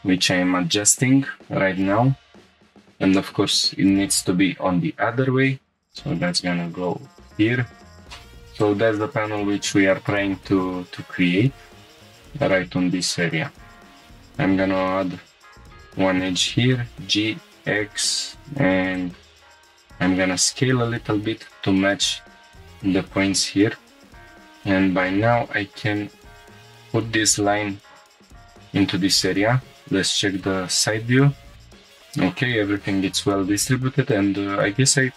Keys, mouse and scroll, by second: 0.4 click, 1.4 scroll up 1, 3.0 scroll up 2, 5.9 click, 5.9 g, 5.9 z, 7.3-8.1 drag, 8.1 scroll up 1, 8.6 click, 9.4-10.0 scroll down 2, 11.0 scroll up 2, 13.0 click, 13.0 scroll up 1, 13.9 ctrl+r, 13.9 right click, 14.8 g, 16.3 x, 18.9 click, 19.5 s, 21.4-22.4 drag, 22.4 g, 22.4 x, 23.1 click, 24.1 scroll up 2, 24.2 g, 24.2 z, 28.5-29.3 drag, 31.7 click, 31.7 scroll down 3, 31.8 shift+middle click, 32.4 middle click, 33.0 scroll down 2, 34.1 click.